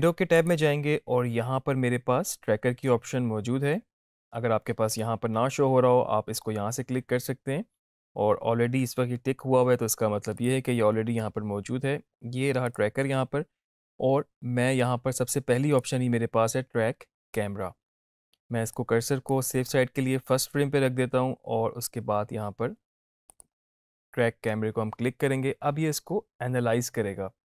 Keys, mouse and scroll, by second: 0.3 click, 10.3 click, 15.2-15.9 drag, 18.7-19.3 drag, 23.2 click.